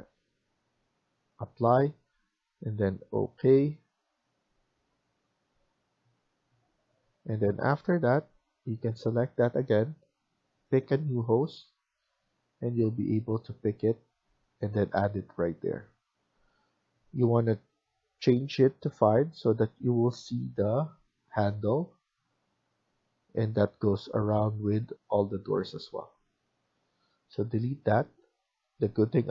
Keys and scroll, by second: 7.7 Escape, 8.0 Escape, 14.1 Escape, 14.4 Escape, 19.2 Escape, 20.4 Escape, 25.7 Escape, 27.2 Delete.